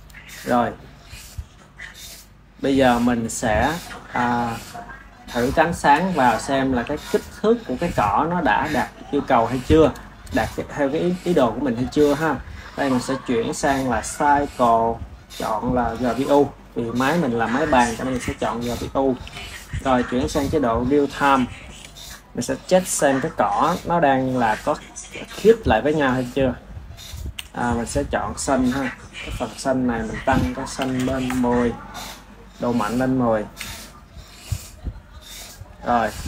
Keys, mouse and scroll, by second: 1.2 click, 2.2 click, 2.8-5.4 middle drag, 5.4 click, 6.5 s, 8.1 click, 9.1-9.5 middle drag, 9.5 KP_1, 12.8-18.7 drag, 19.0 ctrl+s, 20.2 click, 21.5 shift+a, 27.3 g, 29.2 click, 29.9-33.5 drag, 33.5 r, 35.7-36.2 ctrl+middle drag.